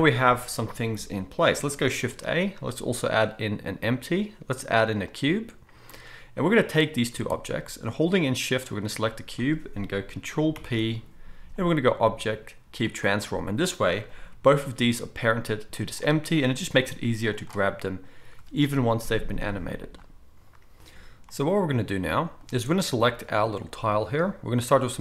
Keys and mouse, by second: 2.0 shift+a, 6.8 click, 8.6 shift+click, 10.5 ctrl+p, 14.3 g, 14.7-23.1 middle drag, 16.7 g, 23.1 click, 23.2-25.0 middle drag.